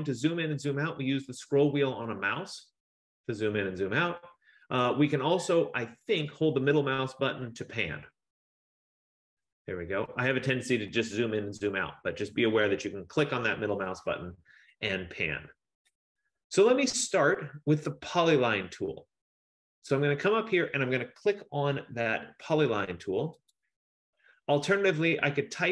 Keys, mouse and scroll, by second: 1.1-2.1 scroll, 2.1-6.5 scroll, 10.4-15.4 scroll, 19.6 F15, 23.6 click.